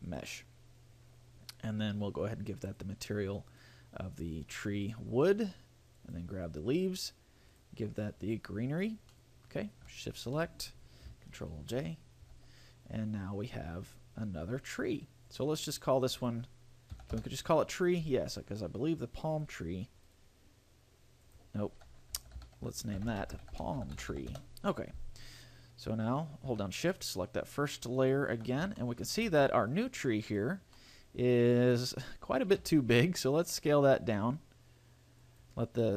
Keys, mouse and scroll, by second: 2.9 click, 3.7 click, 6.3 right click, 7.7 click, 9.3 middle click, 10.4 shift+right click, 12.1 ctrl+j, 13.2-13.6 scroll down 3, 15.1 click, 19.7 click, 20.3 right click, 21.4 click, 27.1 shift+click, 28.2 shift+click, 29.0 shift+middle click, 29.5 a, 29.9 right click, 30.5 right click, 30.9 middle click, 32.1 scroll up 1, 32.8 s, 35.6 click.